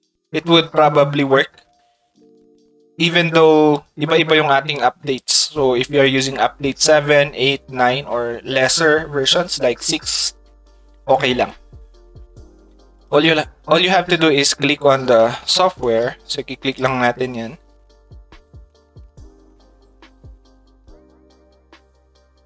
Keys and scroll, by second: 15.5 a.